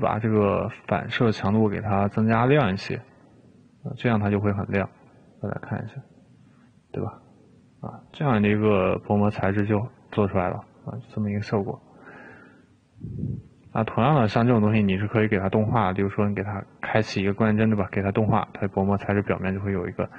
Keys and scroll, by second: 2.0 3.